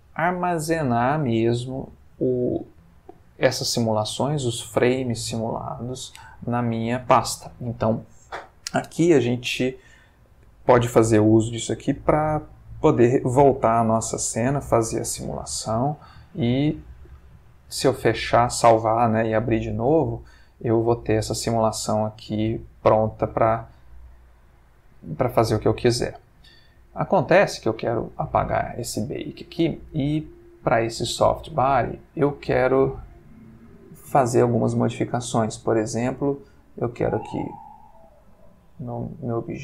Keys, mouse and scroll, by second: 15.9 space, 20.1 Escape, 21.1-26.7 drag, 28.0 click, 31.3 click, 37.1 click, 38.2 click, 38.8 click, 39.5 click.